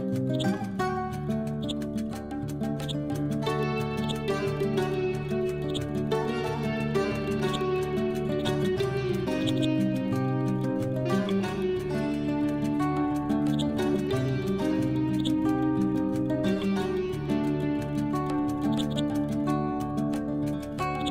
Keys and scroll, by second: 6.6 ctrl+g, 10.2 F12, 10.6 5, 10.8 Return, 11.8 F12, 12.3 6, 12.4 Return, 12.9 ctrl+v, 16.4 Left, 16.8 Up, 20.0 ctrl+u.